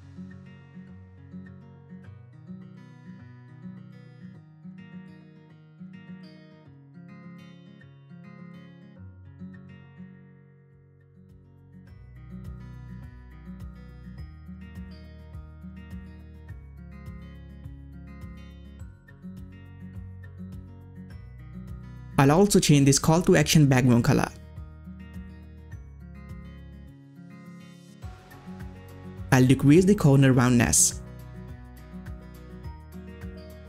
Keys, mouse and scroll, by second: 2.9 click, 3.6-4.6 scroll down 1, 4.6 click, 11.0 click, 11.0-13.3 drag, 13.9 click, 13.9 click, 14.3 ctrl+c, 15.0 click, 15.8 ctrl+v, 16.2 Return, 16.8 click, 17.9 click, 24.7 ctrl+v, 24.9 Return, 25.9 Return, 26.0 click, 29.2-32.3 drag.